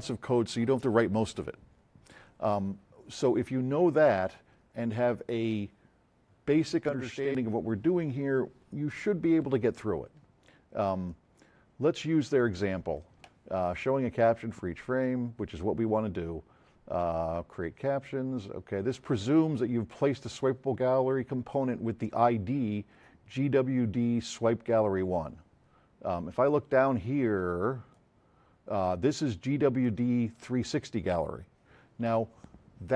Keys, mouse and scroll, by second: 2.3 F7, 11.1-12.4 drag, 26.4-26.7 drag, 29.8 click.